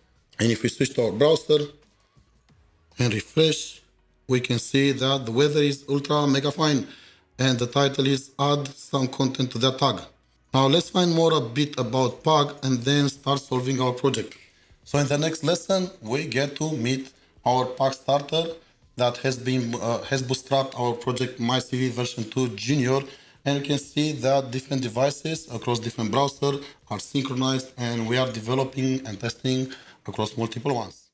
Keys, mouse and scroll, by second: 0.2 ctrl+shift+7, 3.7 ctrl+r.